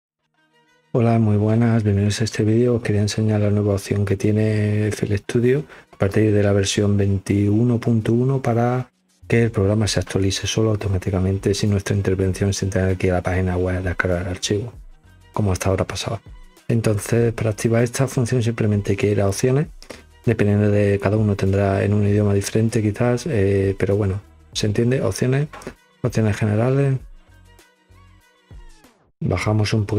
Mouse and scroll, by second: 19.2 click, 28.0 click, 29.2-29.9 scroll down 3, 29.3 middle click, 29.7 middle click.